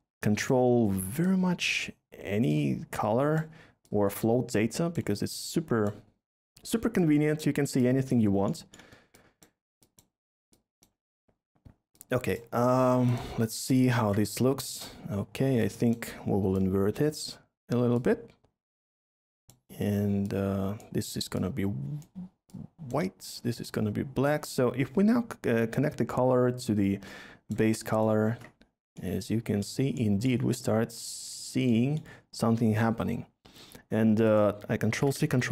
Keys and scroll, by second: 34.9 ctrl+c, 35.2 ctrl+v.